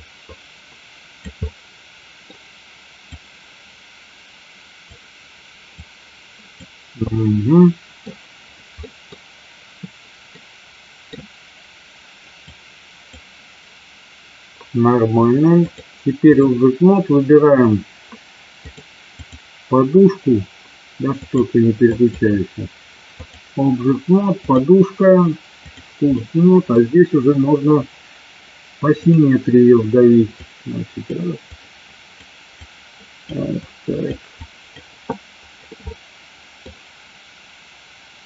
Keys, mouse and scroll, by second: 1.4 middle click, 3.2-5.0 drag, 5.8 click, 7.1 middle click, 9.0 middle click, 10.5 middle click, 12.7 click, 15.8 click, 18.9 click, 21.3 click, 23.2 click, 24.6-25.8 drag, 26.2 middle click, 29.1 click, 30.5 click, 31.5 click, 32.6 click, 33.7 click, 34.5 click, 35.1 click, 35.9 middle click.